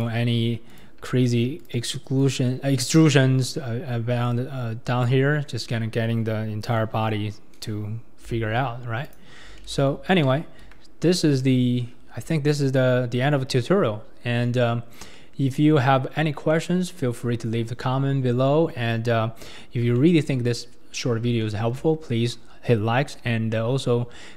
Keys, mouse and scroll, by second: 0.0 click, 0.7 click, 1.1 Tab, 1.6 click, 2.2 click, 3.2-4.3 scroll up 4, 4.3 click, 5.3-7.3 scroll down 5, 8.3 g, 9.7 ctrl+z, 10.1-10.6 scroll up 1, 11.1-11.4 scroll up 2, 11.4 Tab, 11.9-12.4 scroll down 5, 12.4-13.5 scroll up 2, 13.5-13.8 scroll up 3, 13.8-15.1 scroll down 4, 15.1-16.0 middle drag, 16.0-16.5 scroll up 4, 16.5-17.2 middle drag, 17.2 KP_1, 17.7-18.6 scroll down 3, 18.6-19.5 scroll up 2, 19.5-20.0 scroll down 2, 20.0-21.1 shift+middle drag, 21.1-21.4 scroll down 2, 21.4-24.0 shift+middle drag, 24.0-24.3 scroll up 2.